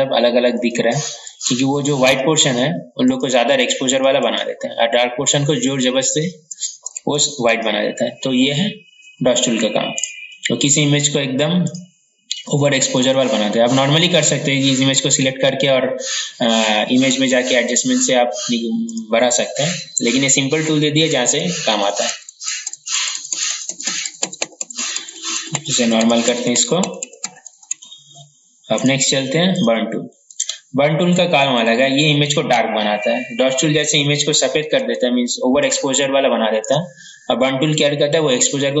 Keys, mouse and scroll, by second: 0.6-8.6 drag, 10.0 right click, 11.7 click, 21.2 ctrl+z, 21.5 ctrl+z, 21.8 ctrl+z, 22.0 ctrl+z, 22.2 ctrl+z, 22.3 ctrl+z, 22.6 typing, 23.2 ctrl+z, 23.8 ctrl+z, 27.0 ctrl+z, 28.9 right click, 29.6 click, 31.5 ctrl+z, 31.9 ctrl+z, 36.1-38.8 drag.